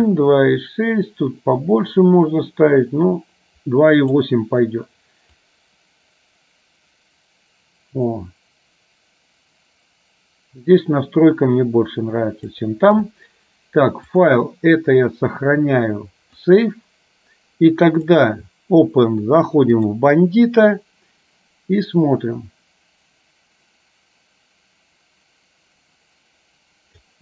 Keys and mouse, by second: 0.3-4.3 drag, 5.4-12.7 drag, 14.3-16.9 drag, 18.0-20.3 drag, 22.2-27.2 drag.